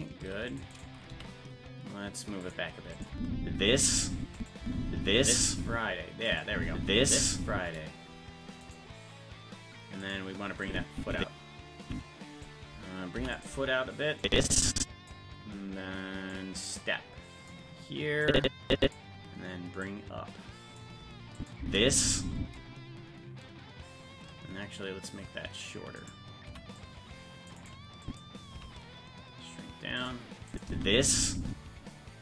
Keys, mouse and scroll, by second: 0.2 c, 1.1 g, 2.9 click, 3.1 space, 4.3 click, 4.3 space, 4.6 space, 6.1 space, 6.3 click, 6.5 space, 8.7 right click, 10.6-12.4 drag, 13.1 i, 14.2 click, 16.3-17.5 drag, 18.2 click, 19.8 click, 21.4 click, 21.6 space, 26.0 right click, 26.5 c, 28.0 click, 28.5 s, 30.5 click, 30.6 space.